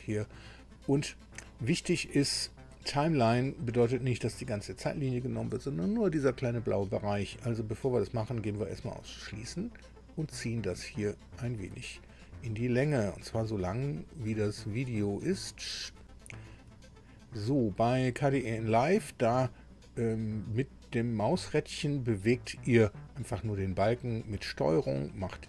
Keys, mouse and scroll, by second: 8.7 click, 10.4-11.7 drag, 11.9-12.5 ctrl+scroll down 2, 12.7-13.5 ctrl+scroll up 4, 14.0 ctrl+scroll up 2, 15.4 scroll up 2, 15.7-16.2 scroll down 3, 16.2 ctrl+scroll up 2, 17.8 click, 19.7-20.1 scroll down 2, 20.3-20.6 scroll up 2, 20.8-21.2 scroll down 2, 21.3-21.6 scroll up 2, 21.8-22.2 scroll down 2, 22.7-23.1 scroll down 2, 23.1-23.6 scroll up 2, 23.8 scroll up 2, 24.6-25.1 ctrl+scroll down 2, 25.2 ctrl+scroll down 2.